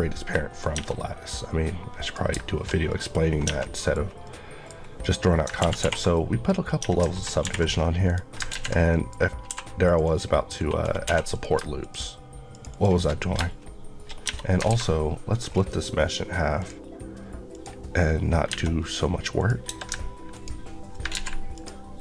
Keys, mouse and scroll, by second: 0.6 Tab, 0.8 middle click, 1.2 scroll up 1, 1.9 click, 2.7 middle click, 3.1 scroll down 1, 3.3 Tab, 3.5 middle click, 3.8 scroll down 1, 4.1 middle click, 5.5 ctrl+1, 5.9 ctrl+2, 6.0 middle click, 6.4 scroll down 1, 6.7 Tab, 7.3 ctrl+r, 7.5 ctrl+click, 7.9 right click, 8.4 ctrl+z, 8.8 middle click, 9.0-9.3 scroll up 1, 9.4 3, 9.7 click, 9.9 Left, 11.2 click, 12.4 shift+click, 12.4 shift+Left, 13.0 Left, 14.1 Left, 14.2 scroll down 1, 14.6 alt+x, 15.3 scroll down 1, 16.4 click, 17.9 scroll up 1, 18.3 Tab, 18.6-19.2 scroll up 1, 19.2 click, 21.0 ctrl+click, 21.0 ctrl+z, 21.4 ctrl+click.